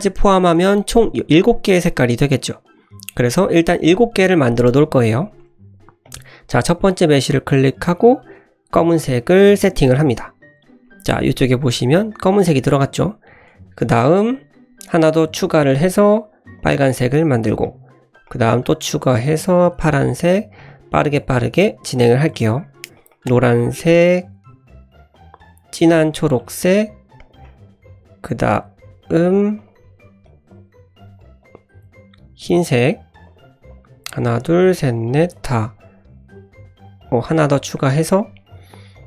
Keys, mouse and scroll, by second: 0.2-0.6 scroll down 1, 0.6 middle click, 2.5 middle click, 2.9-3.3 scroll down 1, 6.0 click, 7.7 click, 11.2-11.5 middle drag, 11.7 middle click, 13.9 click, 14.8 click, 15.9 click, 17.5 click, 18.1 click, 19.3 click, 20.6 click, 21.1 click, 21.4 click, 22.2 click, 23.5 click, 24.1 drag, 25.1 click, 26.5 click, 26.7-27.2 scroll down 2, 27.2 click, 29.3 click, 29.6 click, 30.2 click, 30.5 drag, 31.2 click, 31.4 click, 33.2 click, 33.7 click, 34.2 click, 34.6 click, 35.0 click, 35.3 click, 35.6-36.5 scroll up 2, 36.5-37.1 scroll down 3, 37.0 click, 37.7 click, 38.0-38.5 scroll down 2, 38.5 click, 38.9 click.